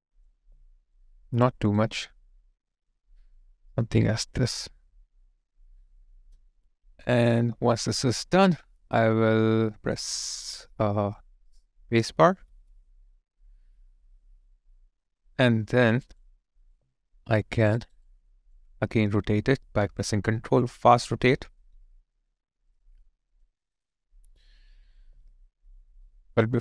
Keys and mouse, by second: 0.4 alt+click, 1.3 alt+right click, 4.5 alt+click, 12.5 space, 16.7 alt+click, 17.7 alt+right click, 18.0 alt+click, 26.1 alt+middle click, 26.5 alt+click.